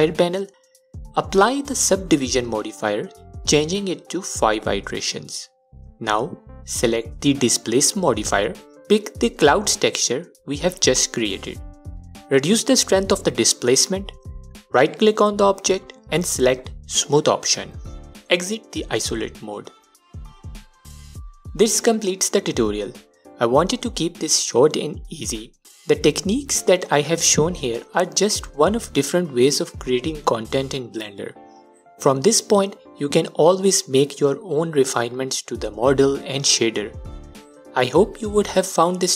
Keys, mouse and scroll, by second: 1.6-3.0 drag, 3.5-4.5 drag, 5.2 click, 6.2-14.3 drag, 15.0-19.4 right drag, 17.5 KP_Divide, 19.4 click, 20.4 click, 22.2 click, 22.9-39.1 alt+drag, 26.3-26.8 scroll down 2, 28.0-28.5 scroll up 2, 28.5-29.2 scroll up 1, 32.6-33.3 scroll down 2, 33.3-33.6 scroll down 1.